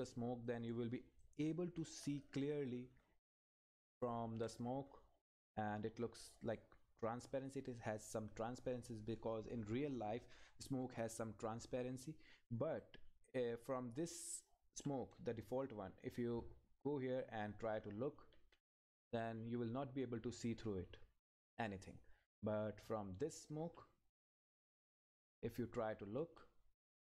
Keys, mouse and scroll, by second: 0.0 click, 0.7 Down, 1.2 click, 1.6 Right, 1.9 Up, 4.3 Right, 4.8 Up, 5.5-11.6 drag, 12.8 click, 15.1 Right, 21.4 click, 21.6 Left.